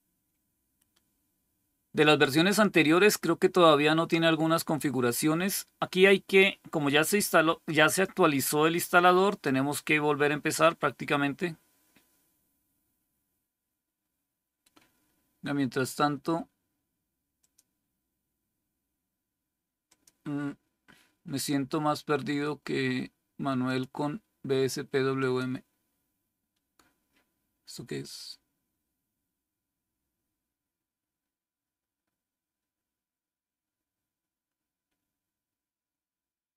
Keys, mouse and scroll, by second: 7.8 click, 9.2 click, 17.3 click, 19.8 click, 23.5 click, 25.1 click, 27.9 click.